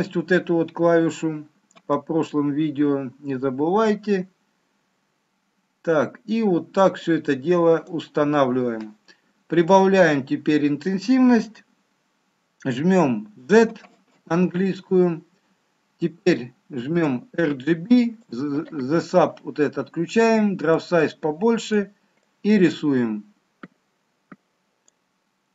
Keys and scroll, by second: 13.3 z.